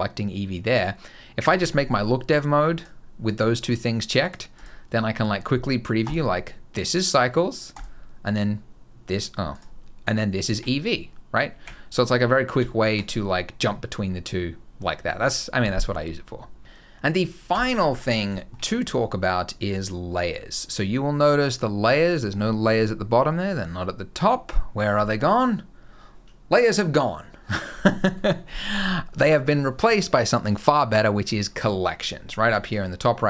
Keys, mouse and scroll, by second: 1.4 click, 2.5 click, 6.1 click, 9.5 click, 10.3 z, 12.3 z, 13.6 scroll down 1, 13.9-15.3 scroll up 1, 17.3 click, 17.6-18.0 scroll up 2, 18.1 shift+middle click, 18.4 middle click, 18.7-20.3 scroll down 3, 32.3 click.